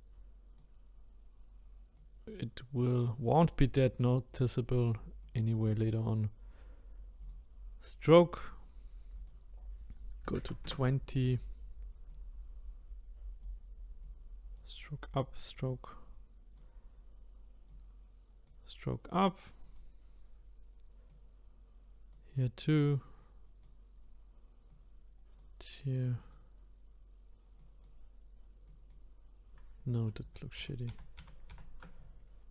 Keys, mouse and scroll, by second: 2.0-5.1 drag, 5.2 click, 7.2-19.7 drag, 21.1-30.2 drag, 30.2 ctrl+z, 30.6-31.7 ctrl+z, 32.2-32.5 scroll down 1.